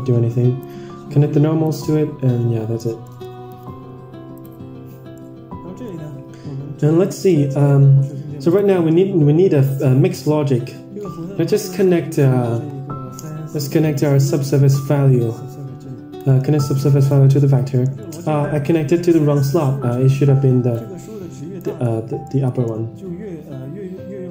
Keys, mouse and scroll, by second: 1.6-2.7 drag, 2.9 middle drag, 3.5 ctrl+s, 4.6 click, 5.4-6.3 middle drag, 7.0 click, 8.4 click, 11.7 scroll up 2, 11.8 middle drag, 14.6 middle click, 16.1-17.0 drag, 17.4 middle click, 17.9 middle click, 19.7 Tab, 20.6 click, 21.7 Tab, 22.1 middle click.